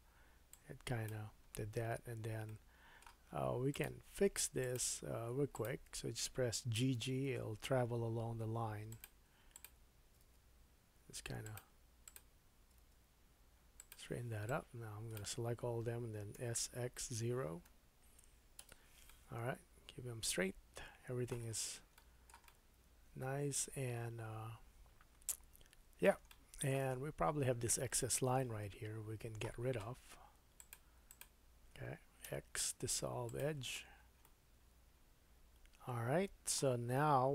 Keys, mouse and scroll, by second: 0.5-3.8 drag, 1.4-2.1 scroll up 2, 2.1-2.5 scroll down 1, 2.5 middle click, 4.6 shift+click, 5.5 shift+click, 6.8 g, 9.5 click, 10.0 g, 12.1 click, 13.0 g, 13.8 middle click, 14.5-24.2 drag, 16.4 s, 19.0 middle click, 21.5-21.9 scroll down 2, 22.0 shift+middle click, 22.5 middle click, 26.3 shift+middle click, 27.0-28.0 scroll up 3, 28.0 2, 28.4 middle click, 30.2 click, 30.7 alt+middle click, 31.0 alt+click, 31.2-37.3 alt+middle drag, 32.2 x, 33.8-34.1 scroll down 3, 36.9 Tab.